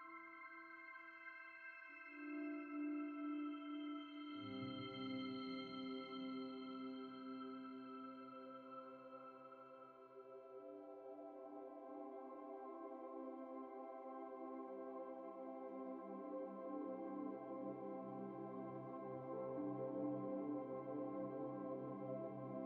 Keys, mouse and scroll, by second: 0.2 ctrl+e, 0.6 v, 5.8 ctrl+t, 6.4 shift+click, 9.8 alt+shift+click, 11.4 Return, 11.4 alt+shift+click, 12.2 double click, 14.4 ctrl+t, 15.0 shift+click, 17.7 Return, 18.0 typing, 18.8 double click, 20.4 typing, 20.6 ctrl+s, 21.3 Escape, 21.8 alt+Tab.